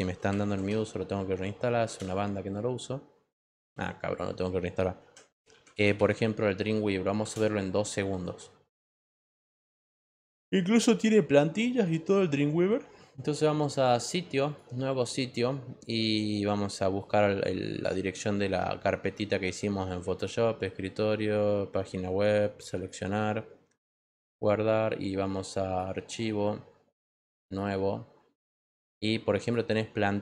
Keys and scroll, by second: 0.0-1.1 typing, 1.8 Return, 5.3-6.4 typing, 7.2 Return.